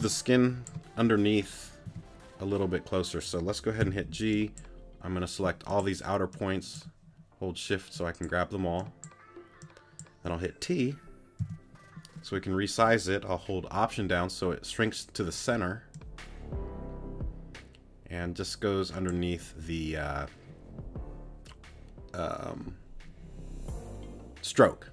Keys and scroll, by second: 0.0 space, 1.8 t, 3.8 g, 11.4 t.